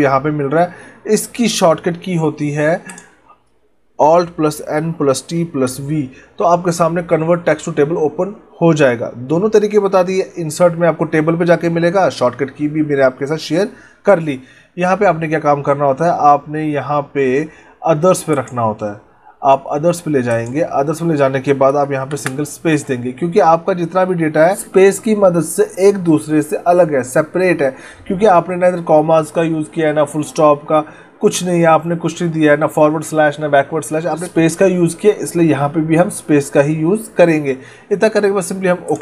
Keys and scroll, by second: 2.6 alt+n, 22.0 space.